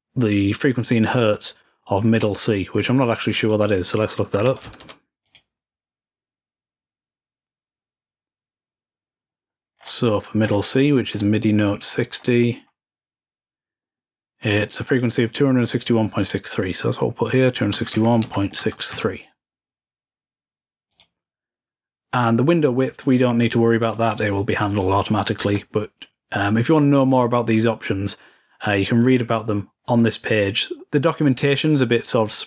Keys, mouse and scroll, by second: 3.2 click, 5.1-6.1 drag, 9.4-13.2 scroll down 4, 14.4-15.7 drag, 16.0-18.6 drag, 20.7 click, 22.0-23.1 drag, 23.6 click, 24.5 click, 28.5-29.6 scroll down 2, 29.6-30.6 scroll up 2.